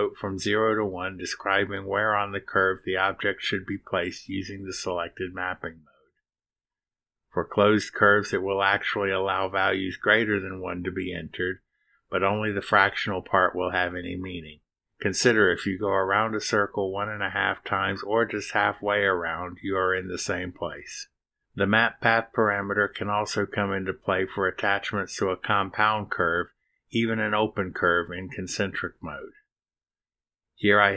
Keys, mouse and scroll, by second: 11.9 click, 12.7 0, 13.3 ., 14.5 2, 16.4 6, 18.0 BackSpace, 18.7 1, 21.1 ., 22.2 2, 23.0 6.